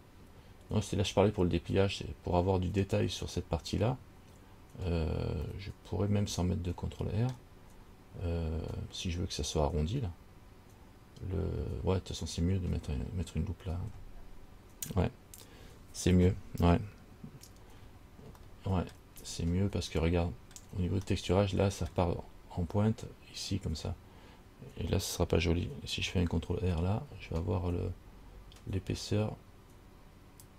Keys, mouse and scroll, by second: 5.7 middle click, 18.0-18.5 scroll up 1, 18.5 scroll up 1, 18.6 shift+middle click, 19.3-20.1 scroll up 2, 20.2 middle click, 21.2 shift+scroll up 1, 21.4 shift+middle click, 27.3 ctrl+r.